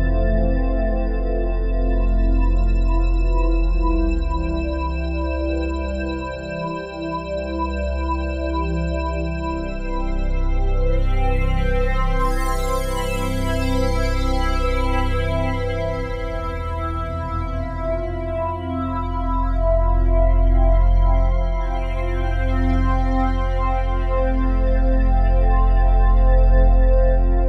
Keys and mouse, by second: 0.2 click, 1.7 shift+click, 2.4 ctrl+alt+click, 3.1 alt+shift+click, 3.7-5.8 shift+drag, 6.0-9.4 ctrl+alt+drag, 9.7 ctrl+z, 10.2 click, 10.8-11.5 typing, 13.3-16.3 drag, 16.4 shift+click, 17.5-20.8 alt+drag, 21.1 alt+click, 22.5-22.9 typing, 24.6 click, 25.5 ctrl+alt+click, 26.0 alt+shift+click, 26.6-27.4 alt+drag.